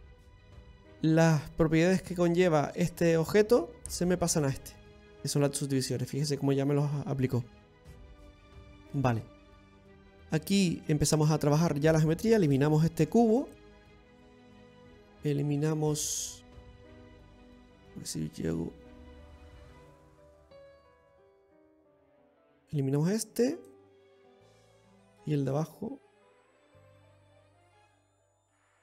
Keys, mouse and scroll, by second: 7.5 middle click, 7.5 scroll down 3, 9.8-10.2 scroll up 2, 10.3 shift+middle click, 11.9 Tab, 11.9-12.6 scroll up 2, 12.6 right click, 13.7 x, 14.8 middle click, 16.3-16.7 scroll down 2, 17.0 middle click, 19.7 right click, 20.4-21.1 scroll up 3, 21.1 scroll down 1, 21.1-21.5 scroll down 3, 21.6 middle click, 22.1-22.7 scroll up 2, 23.2 right click, 23.6 x, 24.8 middle click, 26.4 middle click, 28.2 shift+middle click.